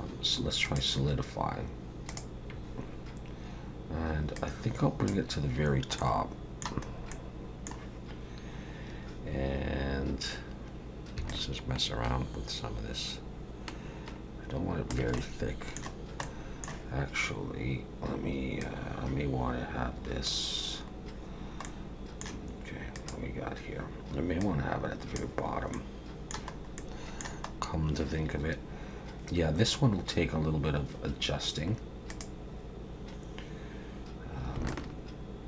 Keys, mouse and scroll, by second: 0.7 click, 4.4 click, 6.0 middle click, 6.9 scroll up 2, 7.1 middle click, 11.3 shift+click, 15.2 middle click, 15.9-16.2 scroll down 1, 16.2 middle click, 18.6 click, 20.9-21.6 scroll down 1, 21.6 middle click, 22.9 click, 24.4 click, 25.7 middle click, 26.6 scroll up 1, 26.8 middle click, 27.5-28.8 scroll up 1, 32.1 click, 34.7 shift+click.